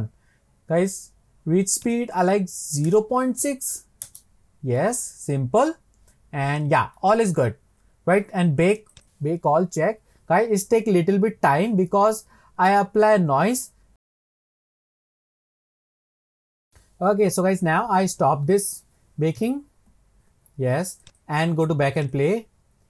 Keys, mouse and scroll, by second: 5.5-6.1 scroll down 8, 6.1 scroll up 1, 6.3-8.9 scroll down 1, 8.9-19.8 drag, 21.0-22.8 drag.